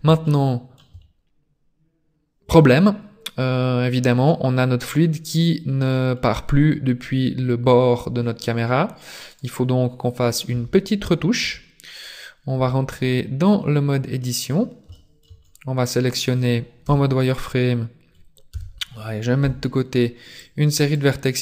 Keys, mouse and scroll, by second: 0.3 shift+middle click, 2.7-3.1 scroll up 2, 7.2 scroll down 2, 8.0 scroll down 1, 9.5 right click, 10.1 scroll up 2, 10.7 Tab, 11.5 Tab, 12.1 right click, 12.7 Tab, 13.1 middle click, 14.5 scroll up 4, 14.9 shift+middle click, 15.4 scroll up 3, 16.9 z, 18.5 KP_3, 19.1 b.